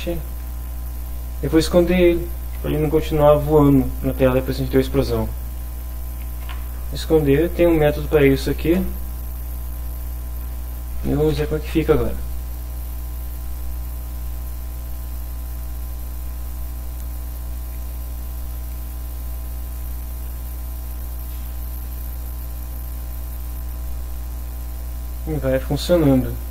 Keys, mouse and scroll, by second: 0.1 shift+Return, 0.6 shift+0, 5.1 ., 5.8 h, 6.4 i, 8.8 Return, 9.6 Down, 10.4 Down, 11.3 F5, 13.5 click, 14.5 click, 15.5 click, 16.4 click, 17.7 click, 18.3 click, 18.8 click, 19.2 click, 19.6 click, 20.3 click, 24.2 click, 25.2 click, 26.2 click.